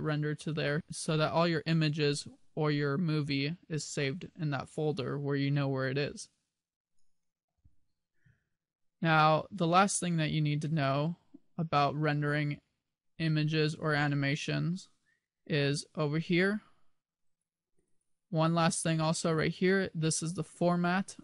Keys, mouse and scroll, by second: 7.2 click.